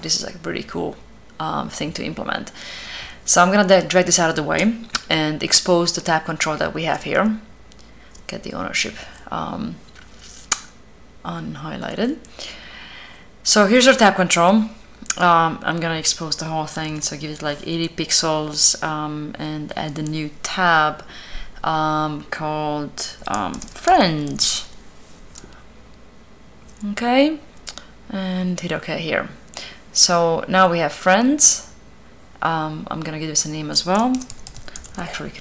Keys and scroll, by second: 16.3-17.1 typing, 23.0-24.8 typing, 33.6-35.2 typing.